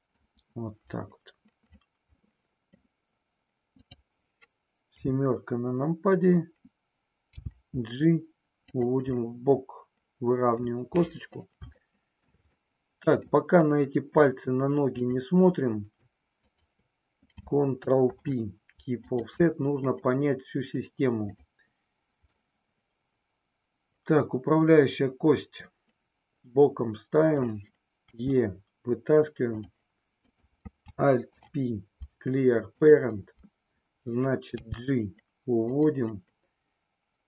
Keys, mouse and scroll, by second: 2.3 middle click, 3.8 click, 4.9 KP_7, 7.4 g, 8.8 click, 9.2-10.3 scroll up 1, 10.3 middle click, 12.0 shift+middle click, 12.8-14.9 middle drag, 14.9 click, 16.4 shift+click, 18.0 ctrl+p, 21.1 click, 22.3-27.4 middle drag, 28.1 e, 30.1 click, 31.3 alt+p, 34.6 g, 35.8 click.